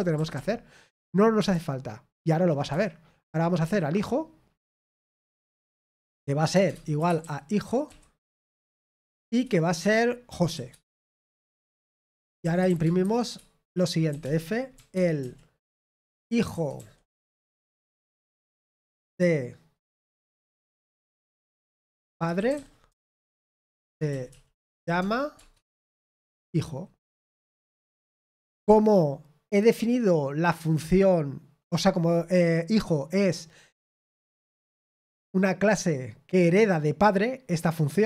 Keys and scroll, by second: 0.0-0.8 typing, 2.2-3.6 typing, 6.0-9.1 typing, 10.3-13.5 typing, 15.5-17.3 typing, 23.0-28.0 typing.